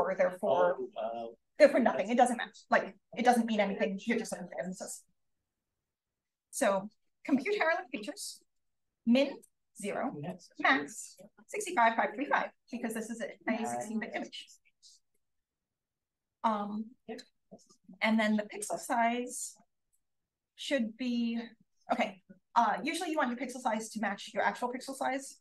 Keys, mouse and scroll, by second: 8.2 click, 8.2 right click, 10.0 click, 10.0 right click, 10.9-12.2 typing, 15.8 click, 15.8 right click, 18.3-20.3 typing, 22.6 click.